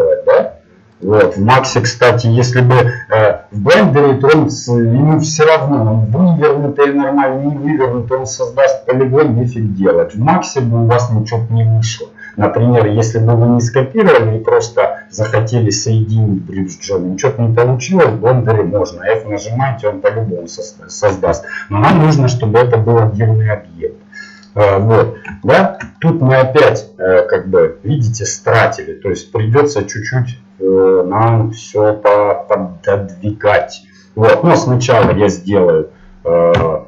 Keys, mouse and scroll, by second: 12.4 middle click, 21.0 middle click, 21.9 f, 23.1 middle click, 23.9-26.1 middle drag, 34.2-36.5 middle drag, 35.0 e.